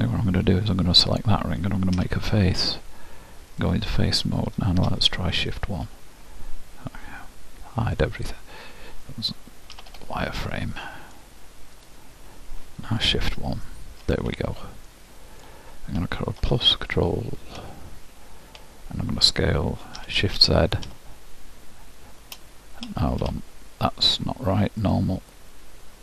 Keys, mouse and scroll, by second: 0.8-2.8 drag, 2.0 f, 3.6-5.5 drag, 9.8 z, 10.6-11.8 middle drag, 11.8-13.8 drag, 14.9-16.8 middle drag, 19.7-21.0 middle drag, 20.1 s, 24.9-26.0 drag.